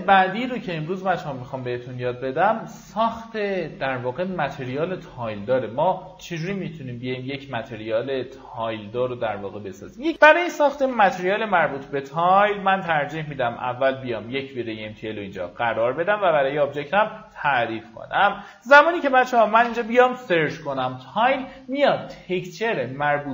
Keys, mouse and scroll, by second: 1.9 scroll up 1, 2.6 middle click, 3.7 ctrl+right click, 4.6-7.3 drag, 8.2 right click, 8.7 alt+middle click, 9.4 middle click, 10.4 click, 10.5-11.1 typing, 12.8 m, 13.8-19.3 drag, 19.1-20.3 typing.